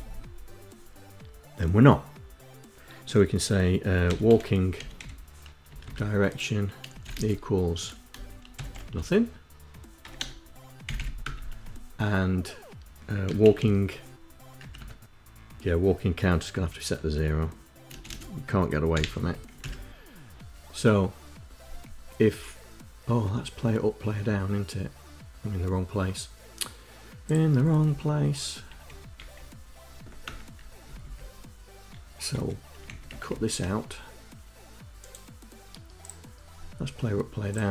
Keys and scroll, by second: 3.6-5.3 typing, 5.5 Down, 6.7 space, 6.8 =, 7.0 space, 8.4 shift+2, 10.0 BackSpace, 11.1 Return, 12.8-13.9 typing, 14.4 Up, 14.6 Tab, 17.7 space, 17.9 space, 18.7 0, 19.3 Down, 19.4 Up, 27.3 Left, 27.6 Left, 28.5 Delete, 28.9 Delete, 30.0 Return, 30.6 Down, 32.1 Home, 32.7 shift+Down, 33.1 shift+Down.